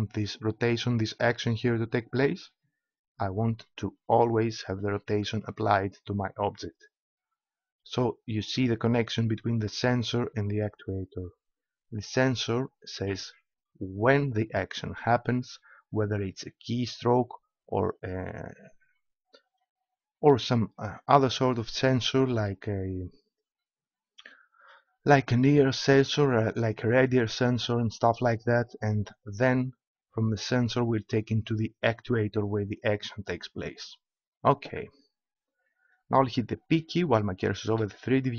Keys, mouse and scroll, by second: 2.4-4.1 drag, 24.4 click, 37.8 p.